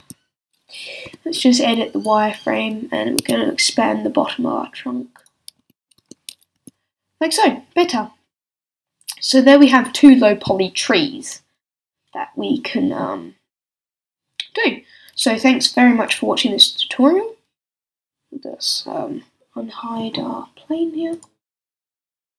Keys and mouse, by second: 0.0 z, 1.0 b, 3.2 s, 5.3 click, 5.6 a, 6.0 Tab, 6.5 z, 9.7-16.0 middle drag, 21.1-22.3 drag.